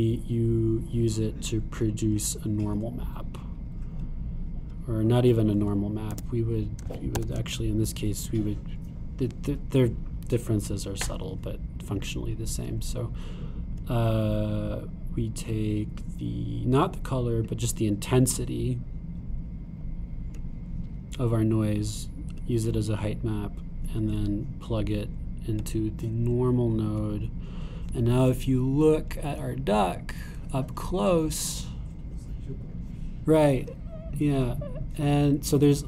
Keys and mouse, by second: 1.4-4.5 drag, 7.1 x, 7.8 shift+a, 18.4-26.5 drag, 26.7-27.7 drag, 30.0-34.7 super+drag.